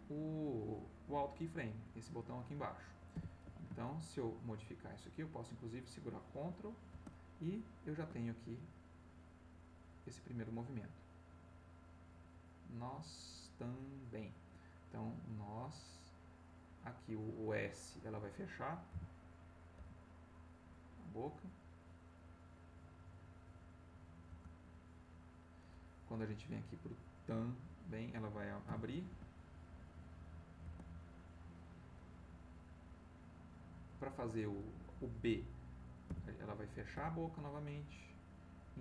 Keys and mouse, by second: 3.1 r, 3.4 x, 6.9 shift+space, 9.0-17.1 drag, 18.9 r, 19.7 x, 24.3 space, 25.9-27.7 drag, 28.6 r, 29.1 x, 30.6 space, 32.3-34.1 drag, 36.0 r, 36.9 x.